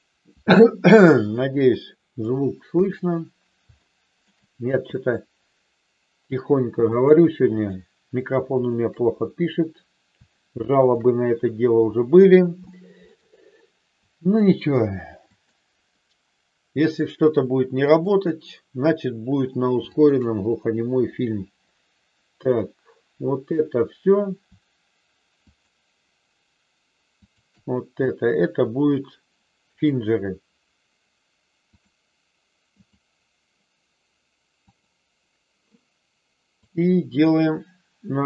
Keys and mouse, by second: 1.6 middle click, 2.6 KP_1, 3.8 shift+middle click, 4.9-6.2 drag, 6.9-8.4 shift+drag, 10.8-11.9 shift+drag, 12.6 shift+middle click, 14.2-15.8 shift+drag, 17.8-19.3 shift+drag, 19.8-21.0 shift+drag, 25.5-26.6 shift+drag, 27.2-28.5 shift+drag, 29.6-31.9 drag, 32.8 click, 34.6 click, 36.5-38.2 drag.